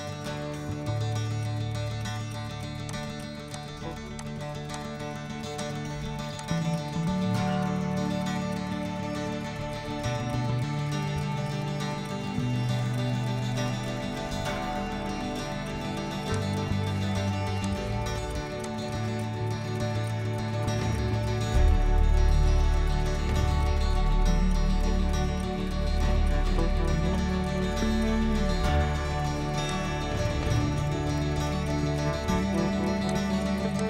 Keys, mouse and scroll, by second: 2.8 click, 3.4 click, 4.1 click, 4.6 click, 6.4-8.2 drag, 8.2-8.9 scroll down 8, 9.1-10.0 scroll up 6, 16.2 click, 17.6 click, 18.6 click, 20.5-23.8 middle drag, 20.5-21.2 scroll down 6, 21.2-22.2 scroll up 8, 22.2-22.8 scroll down 3, 29.6 click, 33.0-33.8 drag.